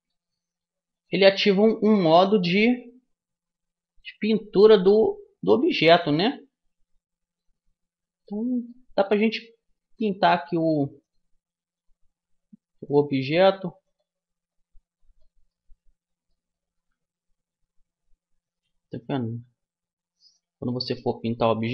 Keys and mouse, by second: 0.7-3.4 drag, 0.7 right click, 5.5-7.9 drag, 7.9-10.1 middle drag, 10.1-13.3 drag, 13.5-15.1 drag, 15.1-17.2 middle drag, 17.2-19.1 drag.